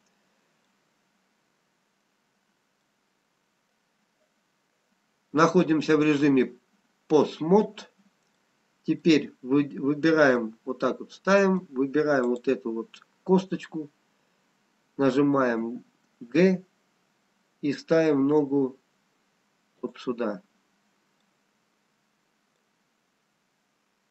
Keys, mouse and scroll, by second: 0.8 middle click, 2.8 scroll up 1, 4.0 middle click, 8.6 middle click, 10.8 middle click, 14.0 click, 16.4 g, 21.6 middle click.